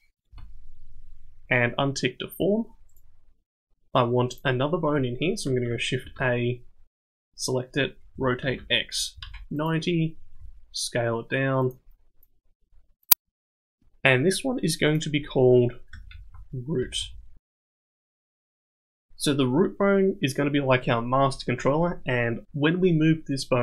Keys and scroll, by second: 6.0 shift+a, 8.1 r, 10.4 s, 12.6 s.